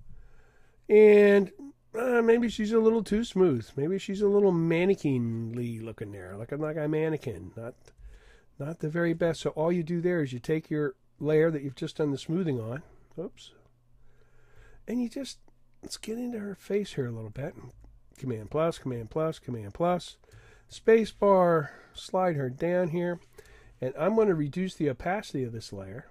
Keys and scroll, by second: 17.7 super+=.